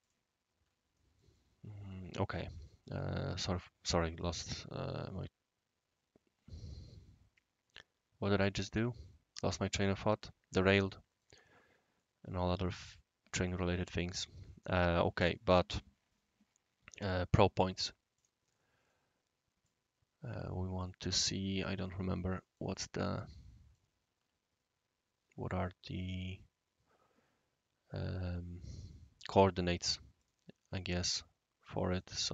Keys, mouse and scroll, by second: 0.0 click, 1.3-2.4 right drag, 2.8-5.2 right drag, 10.8-11.2 middle drag, 11.9-12.7 right drag, 13.4-14.1 right drag, 14.5-15.3 right drag, 18.1 click, 18.9-19.6 right drag, 20.4 click, 20.8 click, 22.3 middle drag, 22.7-23.8 right drag, 30.2 click, 30.6 click, 31.9 click.